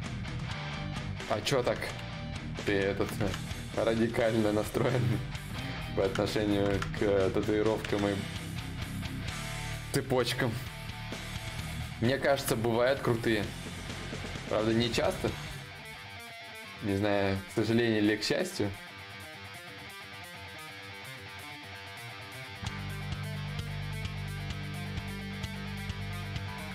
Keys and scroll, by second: 4.2 d, 4.5 d, 4.9 d, 13.9 ctrl+z, 26.1 d.